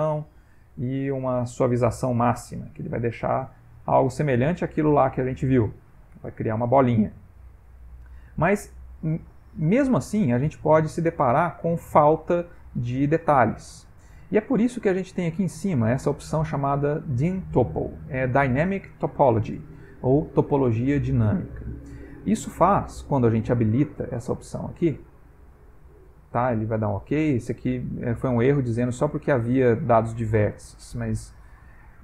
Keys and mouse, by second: 0.5 click, 2.3 click, 3.0 middle click, 6.2 Tab, 6.7 ctrl+middle click, 8.1 middle click, 10.9 middle click, 13.2 middle click, 24.2 click, 28.8 click, 31.5 click.